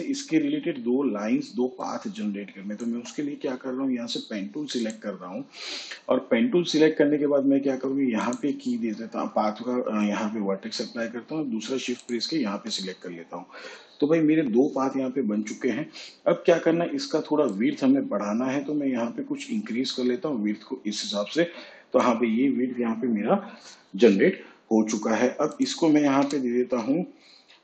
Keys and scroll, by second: 2.6 space.